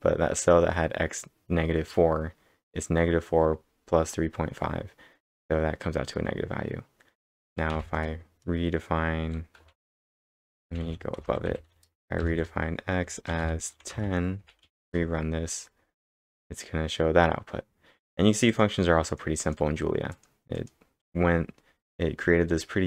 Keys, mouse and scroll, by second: 7.7 b, 9.7-16.8 typing, 14.8 ctrl+Return, 15.7 scroll down 3, 16.3-16.7 scroll up 4, 18.4 scroll down 2, 18.5 click, 18.5 scroll up 1, 19.1 click, 19.4 click, 20.1 click.